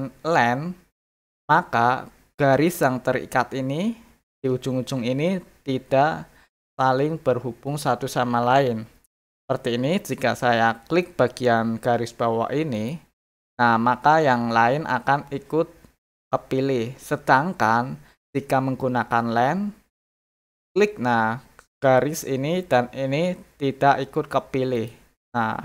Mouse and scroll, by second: 12.7 click, 20.3 click, 24.8 click.